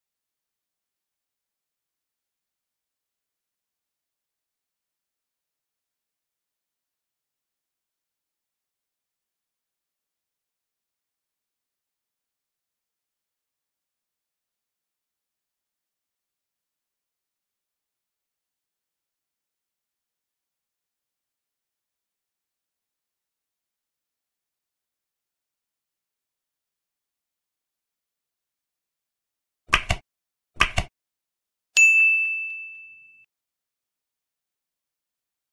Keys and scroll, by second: 3.0 space, 6.1 End, 7.6 ctrl+v, 7.7 End, 8.1 ctrl+s, 8.3 ctrl+Tab, 9.4 space, 10.3 ctrl+BackSpace, 10.9 ctrl+s, 11.7 alt+Tab, 22.5 End, 23.2 Up, 23.8 End, 25.5 Up, 27.6 Escape, 27.8 End, 33.4 space, 34.0 ctrl+BackSpace, 35.3 space.